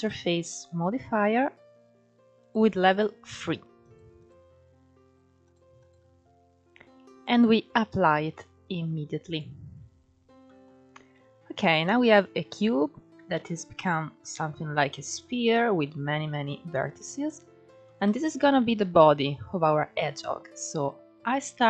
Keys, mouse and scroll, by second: 2.1-5.2 drag, 5.4-9.9 drag, 10.1 shift+middle drag, 10.4-10.8 scroll up 2, 11.2 Tab, 11.5 scroll up 3, 12.6 scroll down 2, 13.0 alt+z, 13.9-15.3 shift+middle drag, 15.3 scroll up 1, 16.4 scroll down 2, 16.7 Tab, 17.5-18.1 shift+middle drag, 18.1 alt+z, 19.9 click, 21.3-21.6 drag.